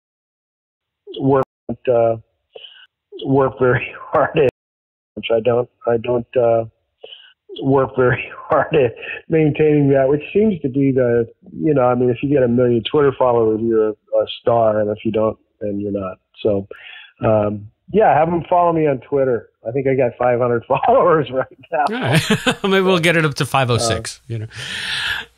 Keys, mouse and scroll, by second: 0.5 ctrl+shift+Delete, 0.7 space, 1.3 space, 1.5 click, 1.6 space, 2.9 click, 3.7 click, 4.3 space, 5.0 click, 5.0 space, 5.8 ctrl+s, 12.0-14.1 drag, 14.5 click, 16.4 ctrl+s.